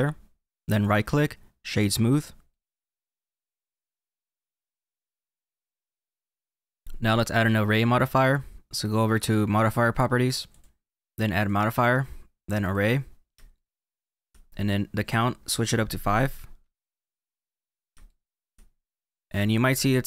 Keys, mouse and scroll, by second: 0.8 right click, 2.5 middle click, 6.6 scroll down 2, 6.8 click, 10.4 click, 11.4 click, 13.5 shift+middle click, 15.4 click, 17.4-18.0 scroll down 3, 18.0 shift+middle click, 18.6 scroll down 1, 19.5-20.0 scroll up 4.